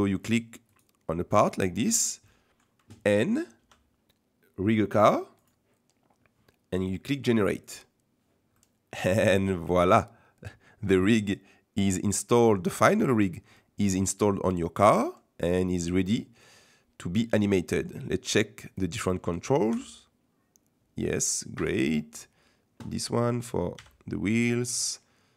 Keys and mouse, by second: 0.2 click, 0.7 click, 2.3 middle click, 3.6 n, 7.6 click, 8.5 middle click, 11.5-13.2 middle drag, 13.5-14.6 middle drag, 17.5 middle click, 19.7 g, 22.0 middle click, 23.7 g.